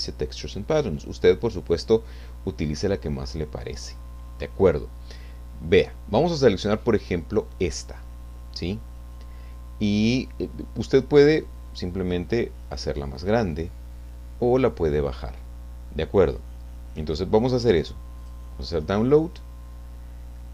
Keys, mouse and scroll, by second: 3.3-3.9 scroll down 2, 11.2 click, 18.2 click.